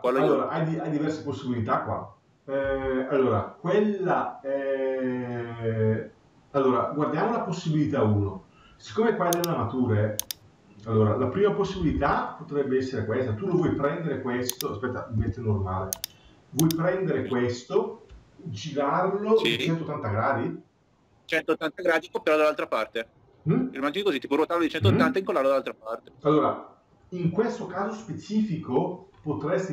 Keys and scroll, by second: 11.4 Escape.